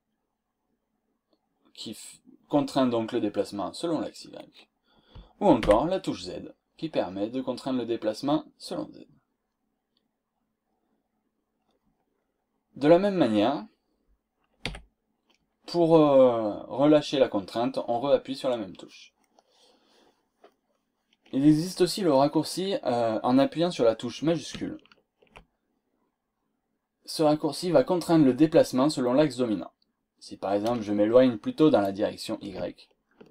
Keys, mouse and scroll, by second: 3.6 scroll down 2, 4.0 scroll up 2, 5.6 y, 6.0-6.4 scroll down 2, 7.0 scroll up 2, 14.7 y, 20.1 scroll down 2, 20.6 scroll up 2, 21.4 scroll up 1, 22.0 scroll down 2, 25.9-26.3 scroll down 1, 26.3-26.6 scroll up 1, 27.8 scroll down 2.